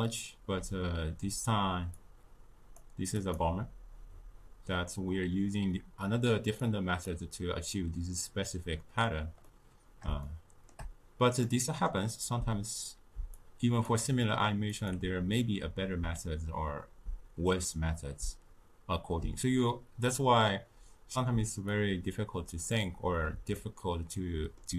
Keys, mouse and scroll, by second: 1.8-6.1 drag, 6.5-9.3 drag, 9.3-13.3 middle drag, 13.3-17.8 drag, 21.6-23.5 drag, 23.5-24.7 ctrl+middle drag.